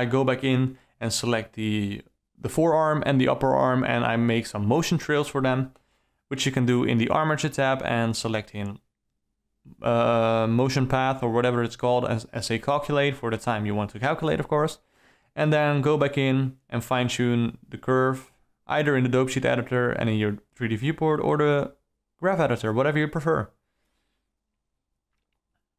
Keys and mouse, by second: 0.0-1.2 typing, 0.3-0.7 alt+middle drag, 1.3 ctrl+alt+middle click, 1.7-2.2 alt+middle drag, 2.7 alt+click, 2.9 Down, 3.3 alt+middle click, 3.7 Down, 4.0 click, 4.2 shift+F6, 4.4 click, 4.7 alt+middle click, 5.2 middle click, 5.5 KP_Decimal, 6.6 alt+a, 7.1-10.2 typing, 7.6 ctrl+z, 7.8 ctrl+z, 8.0 click, 8.8 click, 10.6 alt+middle click, 11.0-11.4 alt+middle drag, 11.6 space, 12.2-12.8 alt+middle drag, 12.9-13.4 typing, 13.2 shift+Left, 14.2 ctrl+s, 14.6 space, 14.6 d, 14.7 d, 14.8 d, 14.8 shift+Left, 15.1 click, 15.7 click, 16.6 alt+middle click, 17.2 middle click, 17.4 ctrl+alt+middle click, 17.7 ctrl+click, 18.0 click, 18.6 alt+click, 19.0 Right, 19.2 Right, 19.4 r, 19.7 i, 19.9 q, 20.7 alt+middle click, 21.0 Up, 21.3 Up, 21.4 alt+middle click, 21.6 shift+e, 22.0 i, 22.3 q, 22.6 alt+middle click, 23.1-23.8 ctrl+alt+middle drag, 24.1 Right, 24.3 Right, 24.4 alt+middle drag, 24.8 KP_0, 25.0 d, 25.0 space.